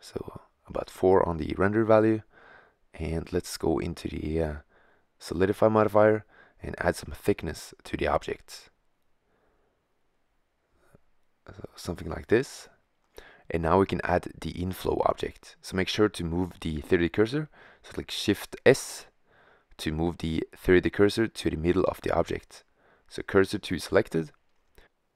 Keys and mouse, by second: 0.5 click, 0.8 middle click, 2.2-3.6 middle drag, 5.5-6.9 middle drag, 8.8 middle click, 12.6-13.6 middle drag, 15.5-19.9 middle drag, 21.3 shift+s, 24.4 shift+a.